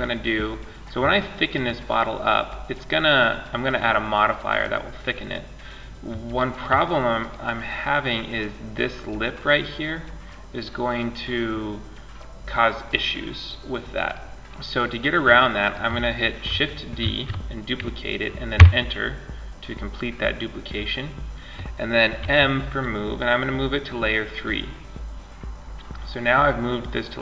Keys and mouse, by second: 5.6-7.0 middle drag, 9.4-11.3 middle drag, 13.5-15.5 middle drag, 16.3 shift+d, 21.5 m.